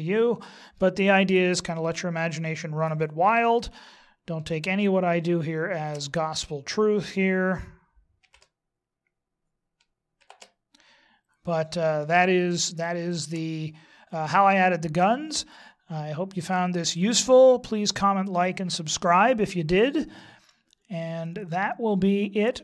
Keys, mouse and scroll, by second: 0.7-1.4 scroll down 4, 1.6 middle click, 3.2 KP_3, 4.5 shift+middle click, 8.2 shift+s, 10.2 shift+c, 11.2-11.8 scroll up 3, 12.6 shift+middle click, 14.5-15.2 scroll up 2, 15.3 scroll down 1, 17.4-18.4 scroll down 1, 20.1 middle click.